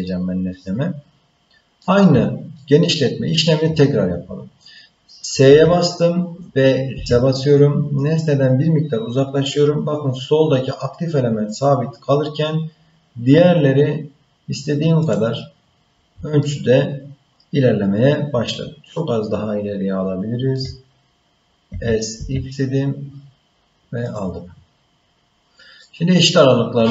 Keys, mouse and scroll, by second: 0.0-1.8 middle drag, 2.5 shift+middle click, 5.4 s, 16.4-20.6 shift+middle drag, 21.7 s, 24.8-25.8 scroll down 1, 25.8-26.9 middle drag.